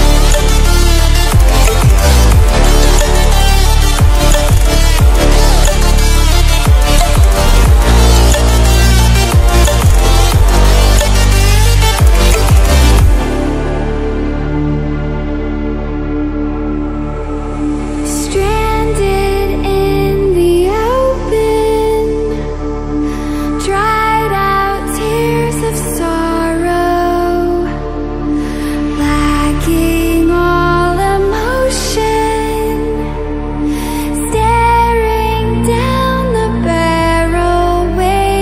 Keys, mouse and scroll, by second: 0.7 right click, 3.1 click, 6.5 right click, 8.7-16.7 drag, 16.7-17.3 scroll up 1, 17.3 click, 18.3-18.8 scroll down 1, 22.3 scroll down 1, 23.5 scroll up 1, 24.5 click, 25.3-26.2 scroll up 1, 26.6-30.2 drag, 30.2-30.5 scroll down 1, 31.5-33.3 drag, 33.3 scroll down 1, 35.8 scroll up 1, 37.5-38.4 drag.